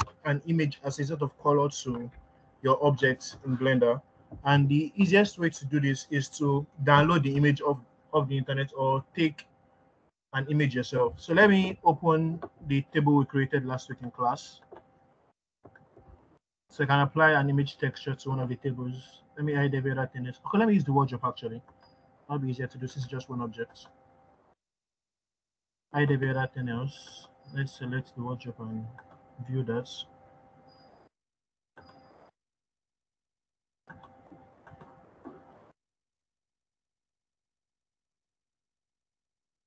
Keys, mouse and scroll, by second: 13.9 click, 19.4-23.3 scroll up 2, 24.2 click, 27.0 click, 27.0-28.1 scroll down 2, 29.4 click, 31.5 click.